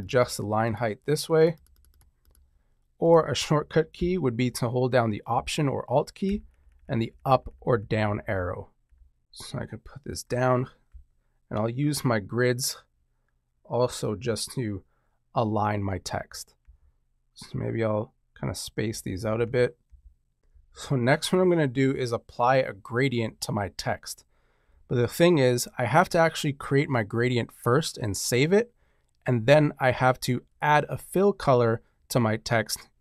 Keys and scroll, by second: 6.2 alt+Up, 9.2 alt+Down, 16.6 alt+Down, 19.0 alt+Down.